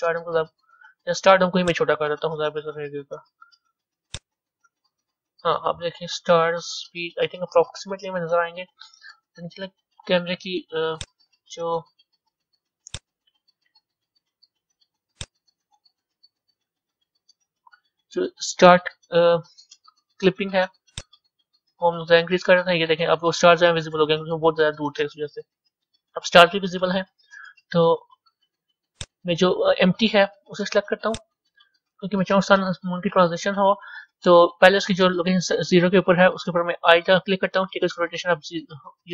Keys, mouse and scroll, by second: 0.1-1.1 scroll down 9, 1.6 click, 2.8 s, 4.7 KP_0, 11.1 click, 15.1-18.3 drag, 18.3 ctrl+z, 21.0-24.0 drag, 31.2 click.